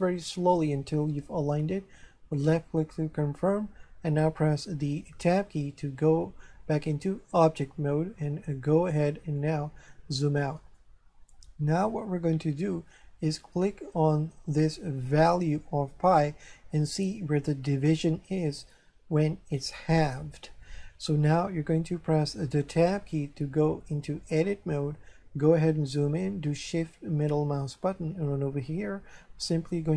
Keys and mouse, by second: 2.3 click, 5.2 Tab, 9.4 shift+middle click, 15.2 right click, 22.6 Tab, 26.6 shift+middle click.